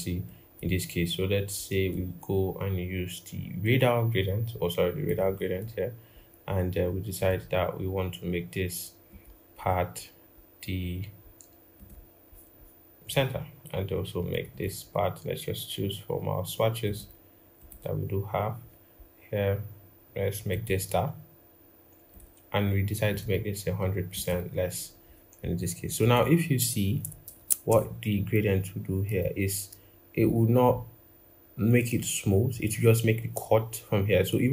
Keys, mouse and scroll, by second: 9.4-9.8 scroll up 1, 12.2-13.9 scroll down 1, 14.3 double click, 18.5-19.2 scroll down 1, 27.1 ctrl+=, 27.2 ctrl+=, 27.5 g.